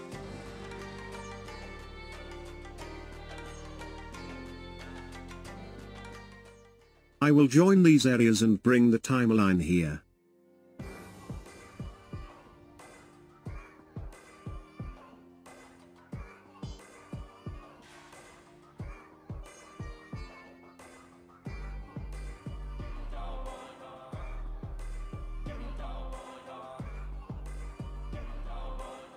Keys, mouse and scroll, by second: 17.1-20.1 drag, 21.1-24.2 drag, 28.2 click.